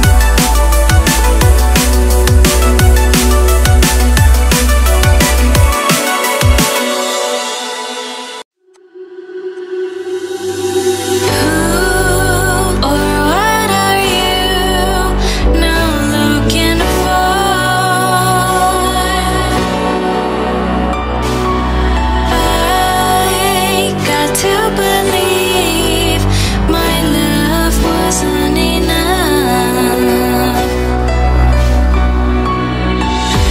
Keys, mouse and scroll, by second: 0.8-1.3 scroll down 1, 1.8 click, 2.8 click, 3.2 click, 3.8 click, 9.4 click, 10.2 click, 10.7 click, 11.1 click, 15.7 click, 17.9 click, 19.4 click, 20.1 click, 20.7 click, 21.9 click, 22.2 click, 23.0 click, 24.4 click.